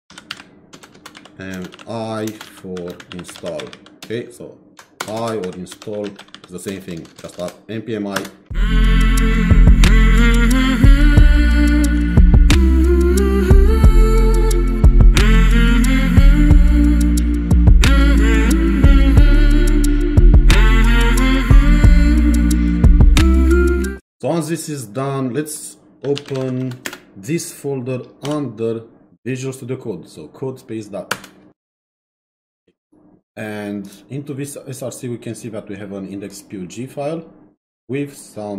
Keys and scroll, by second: 0.0-4.1 typing, 5.2-6.7 typing, 8.2 Return, 25.8-26.8 typing, 31.1 Return.